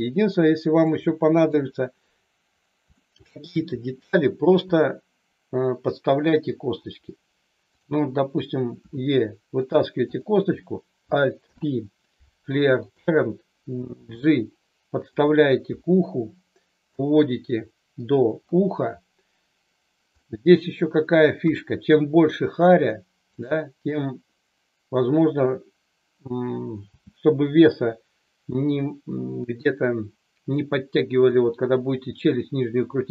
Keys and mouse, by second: 1.4 KP_3, 2.9 shift+middle click, 8.8 e, 9.6 click, 11.3 alt+p, 14.1 g, 15.1 click, 15.7 KP_1, 16.9-18.2 drag, 20.2 middle click, 21.5 KP_3, 23.3 click, 26.9 g, 31.2 click.